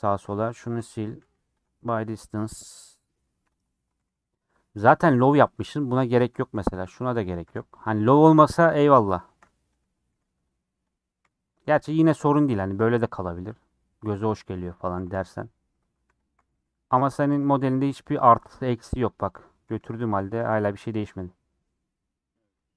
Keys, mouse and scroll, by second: 0.2 2, 0.4 click, 0.7 ctrl+x, 1.0 a, 1.2 m, 2.6 click, 2.8 middle click, 3.3 1, 3.5 click, 4.0 g, 4.9 click, 5.0 g, 6.3 click, 6.5 g, 7.3 click, 7.4 g, 8.4-10.2 middle drag, 9.8 click, 10.2 g, 10.9 click, 11.3 g, 12.7 click, 12.8 g, 13.7 click, 14.3 click, 15.0 g, 15.9 i, 16.1 click, 16.3 g, 17.1 click, 17.3 g, 17.8 middle click, 18.4 click, 18.7 g, 19.4 click, 19.6 g, 20.2 a, 20.8 m, 21.1-22.7 middle drag.